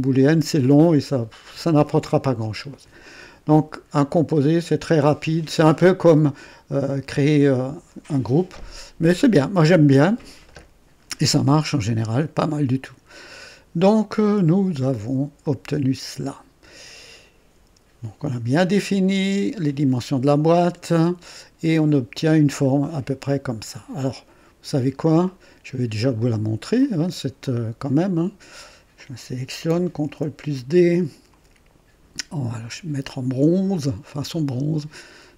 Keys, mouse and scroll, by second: 4.2 click, 11.6-13.1 drag, 13.2-15.1 drag, 15.4-19.1 drag, 20.6 click, 21.9 right click, 22.6-23.9 drag, 24.1 click, 25.2 click, 26.2 right click, 26.8 click, 27.4 click, 28.9 click, 30.0 ctrl+d, 31.2 click, 32.3 click, 33.7 click, 34.2 click, 34.7 click.